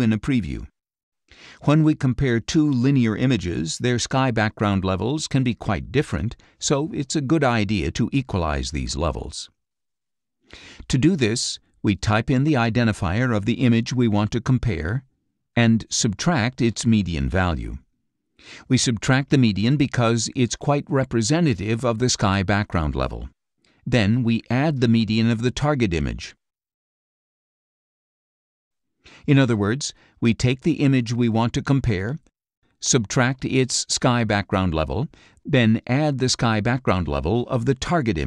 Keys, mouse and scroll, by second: 1.5 click, 6.7 click, 7.9 click, 9.0 click, 9.6 click, 11.6 shift+o, 12.0 shift+i, 13.9-17.9 typing, 19.5-21.8 typing, 22.1 End, 23.1 space, 24.6-27.8 typing, 30.0 click, 32.2 click, 32.8-34.6 drag, 35.7-38.2 drag.